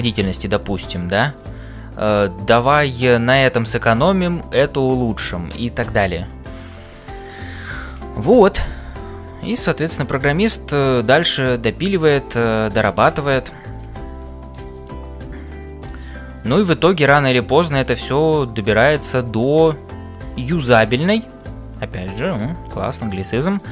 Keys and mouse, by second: 2.0 f, 4.2 f, 6.8 click, 7.8 g, 10.2 g, 12.3 f, 13.3 ctrl+z, 14.3 ctrl+z, 14.6 click, 15.4 click, 15.9 click, 16.7 f, 18.7 f, 20.9 click, 23.5 click, 23.5 f.